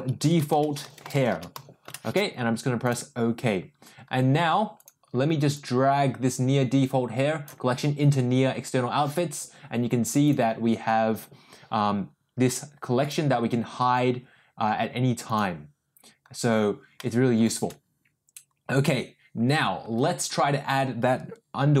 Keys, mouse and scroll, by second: 4.7 click, 5.5-7.7 drag, 10.2 click, 13.1 click, 15.5 click, 16.9 middle click.